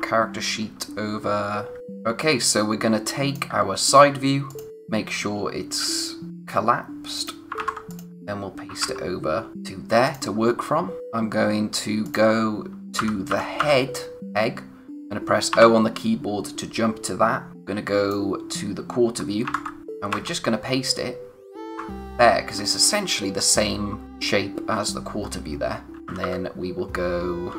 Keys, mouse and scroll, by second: 1.8 click, 7.1 click, 7.5 c, 7.9 click, 10.0 click, 11.3-12.0 scroll up 1, 12.0 click, 13.0-13.6 typing, 15.5 o, 17.5 click, 19.4 ctrl+c, 22.4-24.0 scroll down 1, 25.2-26.0 scroll up 1, 26.0 click, 26.0 typing.